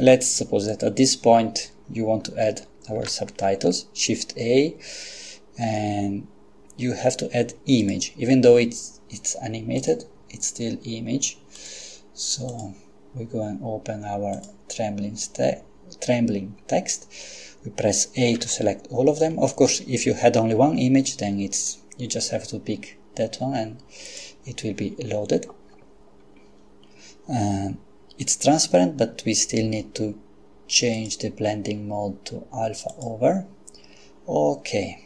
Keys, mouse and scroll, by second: 3.0 shift+a, 7.8 click, 9.8 click, 11.6 click, 12.5 click, 14.4 click, 18.4 a, 24.1 click, 31.0 click, 32.9 click.